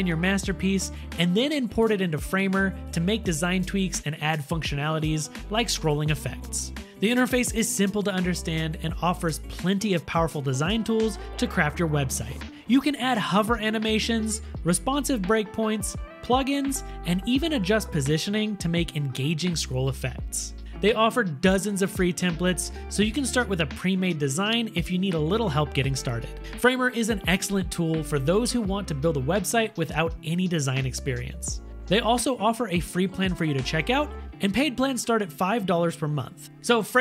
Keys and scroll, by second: 0.0-1.1 typing, 3.0-3.9 typing, 5.2 6, 5.4 Return, 9.4 space, 10.3 super+1, 11.9 super+-, 15.2-20.2 typing, 24.9-25.9 typing, 25.9 Up, 26.1 Return, 29.3 3, 29.4 Return, 31.9 1, 32.1 Return.